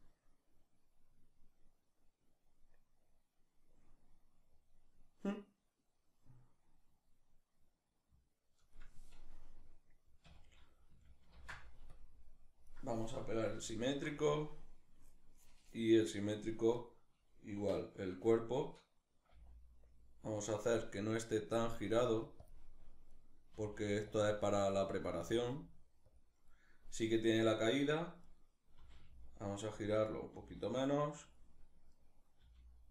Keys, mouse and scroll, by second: 13.3 ctrl+shift+v, 16.4 right click, 18.9 g, 20.1 click, 20.9 right click, 21.3 r, 22.1 click, 22.7 right click, 23.2 r, 23.8 click, 24.3 right click, 24.8 r, 25.8 click, 27.9 right click, 28.4 r, 29.5 click, 29.7 right click, 29.9 r, 31.0 click, 31.5 right click, 32.1 g.